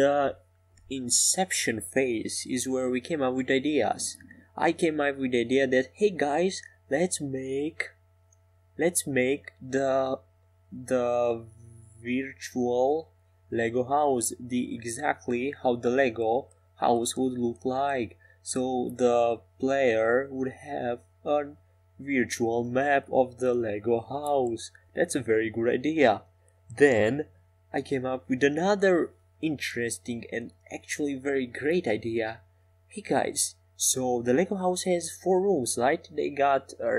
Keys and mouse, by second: 0.9-3.8 drag, 0.9-3.8 right drag, 3.8 e, 9.1-11.2 drag, 19.8 Tab, 20.4 Tab, 20.9-22.6 drag, 25.5 f, 26.5 e, 29.8-31.4 middle drag.